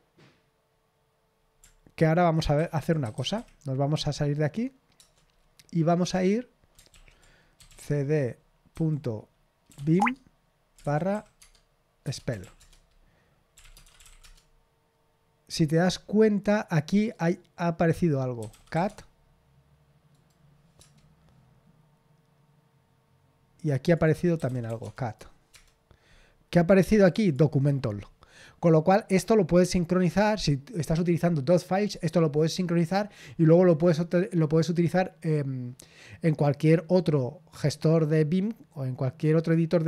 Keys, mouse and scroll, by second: 2.3-3.8 typing, 4.9 Return, 6.9 ctrl+l, 7.3-8.2 typing, 9.4-14.5 typing, 11.4 Tab, 16.9 click, 18.1-19.2 typing, 20.1 right click, 20.8 Return, 23.8 click, 24.1-25.1 typing, 24.4 click, 25.0 right click, 25.5 Return, 27.0-28.9 drag.